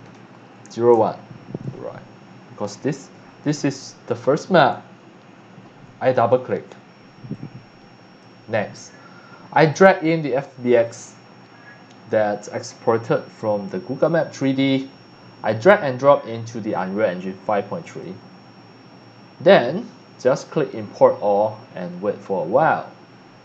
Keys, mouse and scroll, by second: 0.0-1.2 typing, 5.6 click, 6.2 click, 7.3-8.2 drag, 9.6 click, 10.7 click, 14.4 click, 15.5-16.7 drag, 17.8 click, 20.3 click.